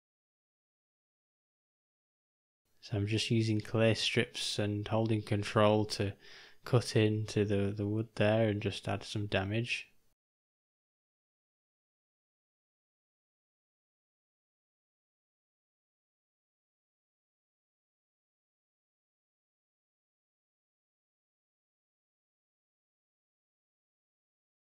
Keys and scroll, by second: 2.9 [, 3.1 [, 7.4 j, 12.3 [, 12.4 [, 20.4 o, 24.1 g.